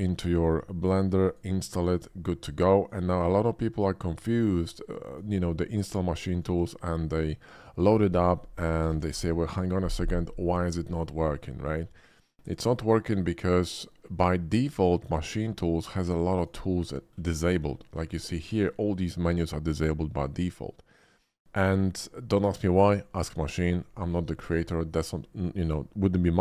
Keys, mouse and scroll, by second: 1.3 click, 1.9 click, 2.9 click, 3.7 click, 4.7 click, 6.3 click, 7.8 click, 8.9 a, 9.1 c, 9.3 h, 11.4 click, 12.5 click, 14.5 click, 16.0 click, 16.8 middle click, 16.9 middle drag, 17.0 middle click, 17.6 middle click.